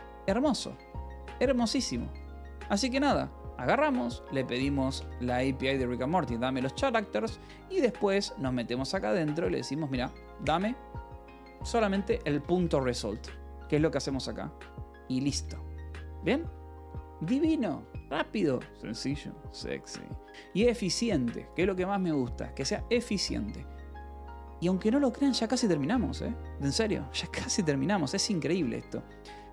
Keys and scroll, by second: 0.3 j, 1.0 k, 2.1 k, 2.8 h, 4.3 j, 5.6 shift+v, 6.7 Escape, 7.1 j, 7.6 l, 9.0 h, 9.8 shift+k, 12.4 Escape, 12.7-14.3 typing, 15.7 j, 16.3 k, 16.8 k, 17.4 j, 24.5-25.8 typing, 26.6 ctrl+p, 27.0 Return, 28.9 j.